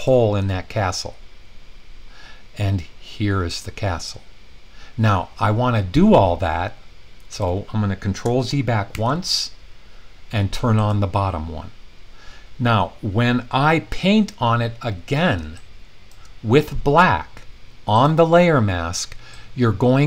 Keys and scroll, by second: 8.9 super+z.